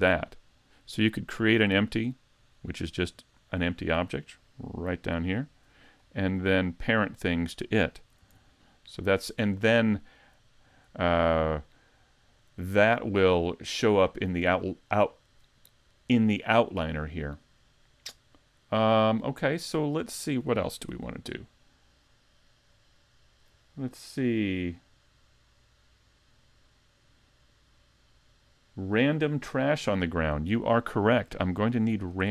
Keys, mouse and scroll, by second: 3.1 click, 6.0 scroll up 2, 6.5 shift+middle click, 8.2 super+z, 8.9-9.3 scroll down 2, 19.4 click, 20.9 shift+c, 22.7 scroll up 2, 30.5-31.2 scroll up 1, 31.2 shift+middle click, 31.2 scroll up 2, 31.8-32.3 scroll up 2.